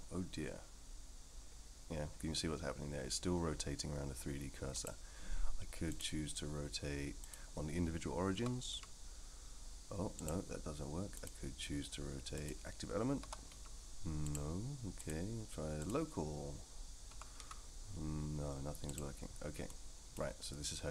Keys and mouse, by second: 6.0-7.3 drag, 8.3 r, 11.2-12.5 drag, 13.2 r, 15.0-16.5 drag, 17.1 r, 19.7 middle click.